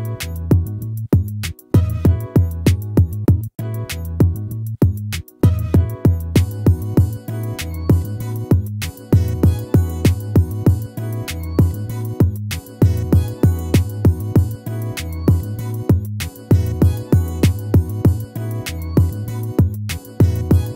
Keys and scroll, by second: 5.6 ctrl+-, 8.4 ctrl+-.